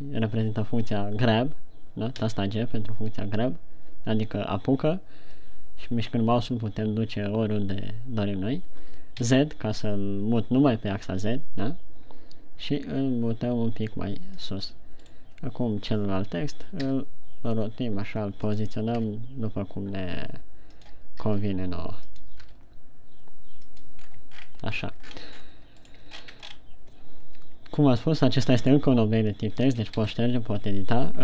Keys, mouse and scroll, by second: 15.1 click, 15.5 right click, 17.2 r, 19.0 click, 19.5 g, 21.4 click, 21.8 r, 22.5 click, 22.9 g, 24.4 click, 24.5-26.1 scroll down 13, 26.2 right click, 26.6-27.0 shift+scroll up 7, 28.6 right click, 29.2 Tab, 30.2 BackSpace, 30.4 i, 31.1 Tab.